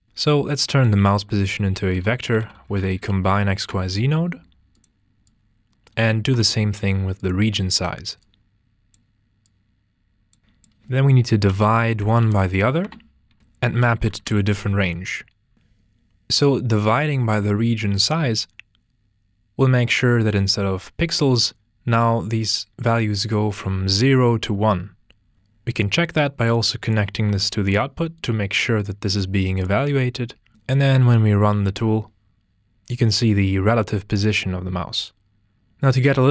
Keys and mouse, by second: 4.7 drag, 6.4 shift+d, 7.2 click, 8.2 drag, 10.4 middle click, 11.8-15.1 drag, 17.3-18.9 drag, 25.8 click, 27.5 ctrl+space, 29.4 click, 32.1-32.7 drag.